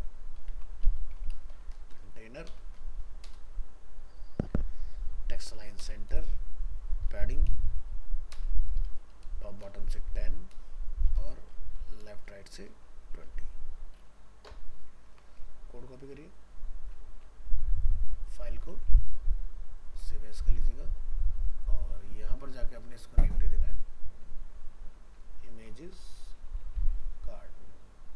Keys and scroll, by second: 13.3 ctrl+s, 17.1 ctrl+c, 18.7 alt+f, 18.8 alt+移, 20.4 ctrl+Tab, 25.4 ctrl+shift+Left.